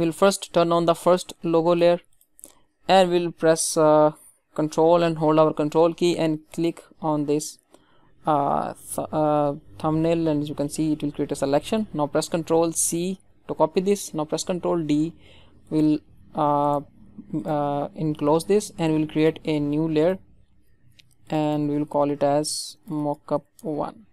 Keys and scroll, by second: 12.6 ctrl+c, 14.8 ctrl+d.